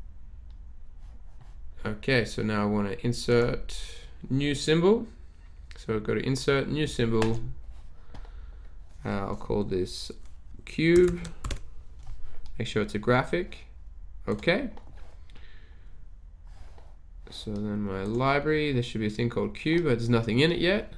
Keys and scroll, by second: 10.9-12.0 typing.